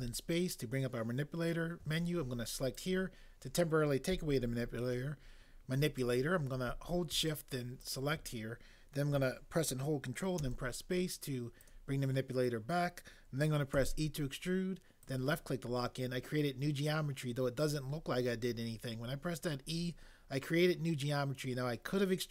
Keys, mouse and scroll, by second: 10.4 ctrl+space, 13.7 e.